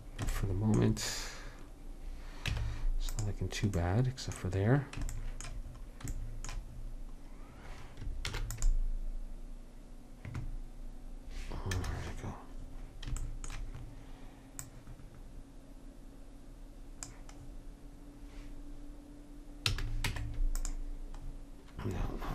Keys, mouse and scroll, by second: 2.6 Tab, 8.3 ctrl+r, 14.7-16.6 drag, 19.7 a, 20.2 Tab.